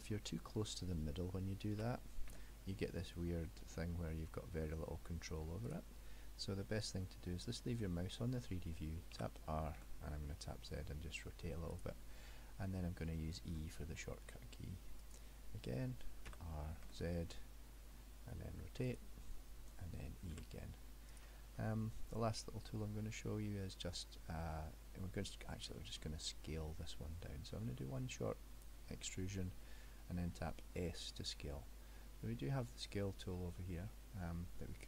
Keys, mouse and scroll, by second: 1.8 r, 9.3 r, 12.8 middle click, 13.6 e, 16.3 r, 20.4 e, 21.6 middle click, 25.8 middle click, 27.8 e.